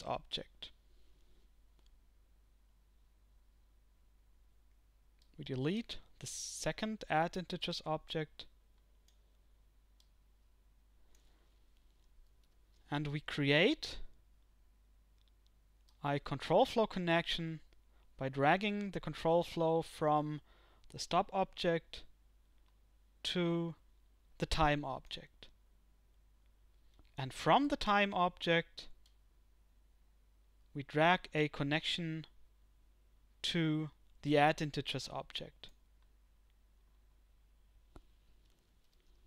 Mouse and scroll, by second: 29.1-31.4 drag, 32.5-35.8 drag.